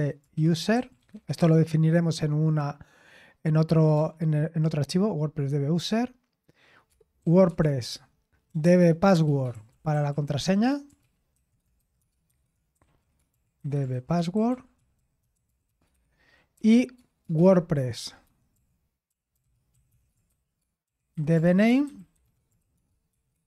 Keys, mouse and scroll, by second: 0.0-1.4 typing, 4.0 typing, 7.2 typing, 7.9 Tab, 8.5-23.4 typing.